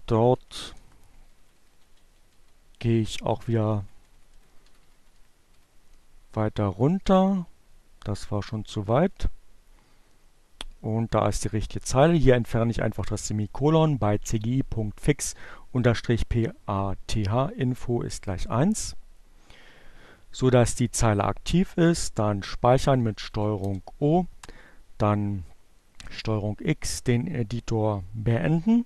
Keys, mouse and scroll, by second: 5.1 Page_Up, 7.6 Page_Up, 8.6 Down, 10.4 Delete, 20.8 ctrl+o, 22.4 ctrl+Return, 23.3 ctrl+x, 28.2 Up.